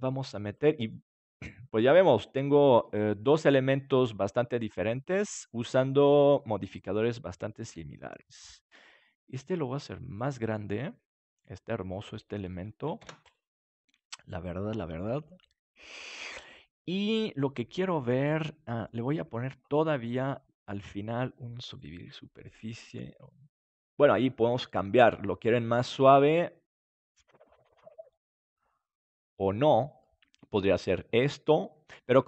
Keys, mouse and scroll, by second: 1.3 middle click, 5.6-7.6 drag, 7.6 KP_7, 8.7 s, 11.0-12.9 drag, 12.9 ctrl+s, 15.1-16.7 middle drag, 17.8-20.1 middle drag, 20.1-22.5 drag, 22.5-24.3 middle drag, 25.8-32.2 middle drag, 29.0-30.9 drag.